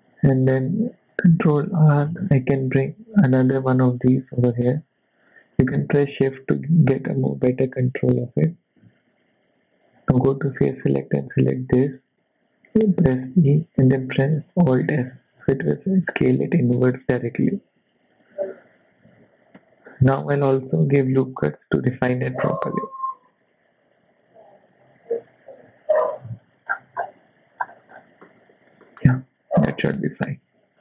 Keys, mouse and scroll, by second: 1.1 ctrl+r, 9.9 click, 10.9 click, 13.7 e, 19.0 z, 20.5 ctrl+r, 23.4 ctrl+r, 26.7-27.2 scroll down 6, 27.2 Tab, 27.6-28.4 scroll down 5, 28.2 middle click, 28.8 shift+middle click, 29.6 scroll down 2, 29.9 middle click.